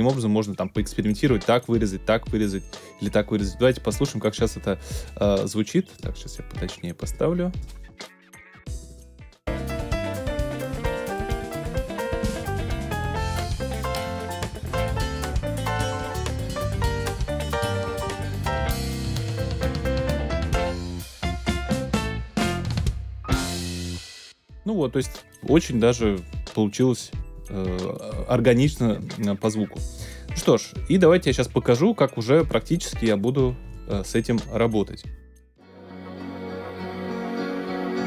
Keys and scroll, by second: 24.0 space.